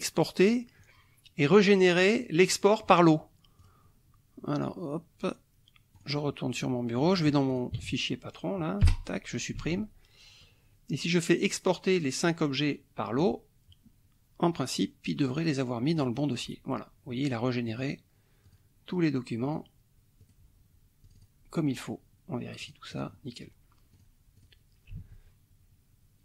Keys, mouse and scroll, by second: 0.4 click, 2.1 click, 3.6 click, 5.9 click, 6.9 click, 7.5 ctrl+click, 7.8 ctrl+a, 8.9 Delete, 9.7 alt+Tab, 13.1 click, 15.4 click, 16.0 click, 17.6 click, 18.5 click, 19.4 click, 20.2 click, 21.0 click, 22.6 click, 23.9 click, 24.3 click, 25.1 alt+Tab.